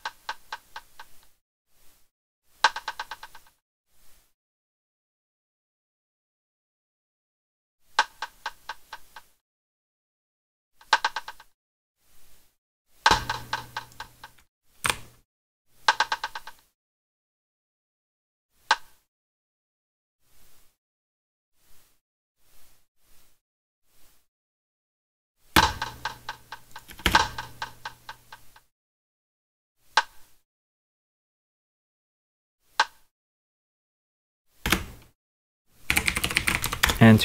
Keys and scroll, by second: 3.3 space, 7.8 space, 11.7 space, 12.9 space, 14.8 Delete, 19.9 space, 25.4 space, 26.8 space, 34.6 space, 35.6-36.9 typing.